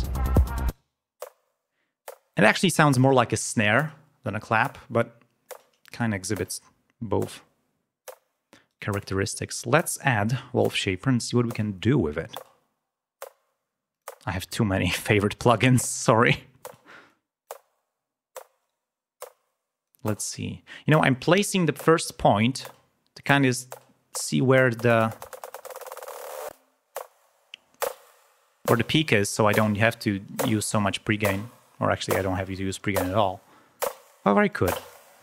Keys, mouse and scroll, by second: 0.7 click, 1.1 ctrl+scroll up 2, 2.3 click, 3.1 click, 8.7 middle click, 9.9-10.6 scroll down 2, 13.9 click, 15.7 click, 17.1 click, 18.6 right click, 19.3 click, 22.4-23.5 drag, 26.7-28.7 drag, 34.5 click.